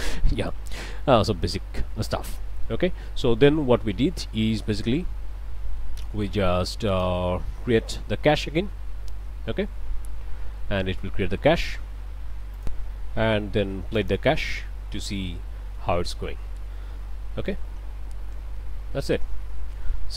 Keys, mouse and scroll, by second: 0.6 scroll down 2, 1.0 middle click, 2.1 scroll down 1, 2.4 middle click, 6.9 click, 12.6 click, 14.0 click.